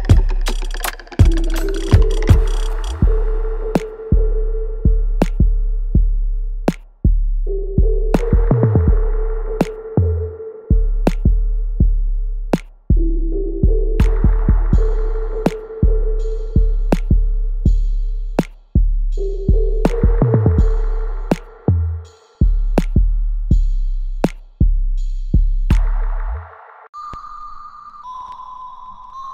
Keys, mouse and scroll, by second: 0.2 alt+click, 1.1 alt+middle click, 1.5 alt+right click, 2.6-4.1 drag, 4.1 g, 5.6 click, 6.2 g, 7.3 click, 7.4 click, 8.2 g, 9.0 alt+right click, 9.3 alt+click, 9.9 alt+middle click, 11.2-12.6 drag, 12.6 g, 13.7 click, 14.9 g, 17.0 click, 17.4 g, 18.4 alt+right click, 18.8 alt+click, 19.4 alt+middle click, 19.8 alt+right click, 20.6-23.0 alt+right drag, 23.8 click, 24.1-29.3 alt+drag.